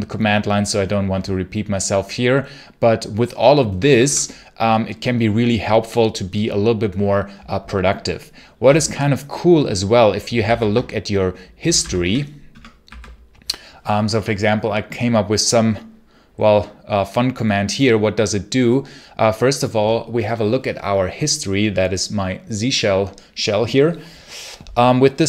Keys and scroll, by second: 3.5 BackSpace, 3.8 BackSpace, 10.3 ctrl+r, 11.2-12.7 typing.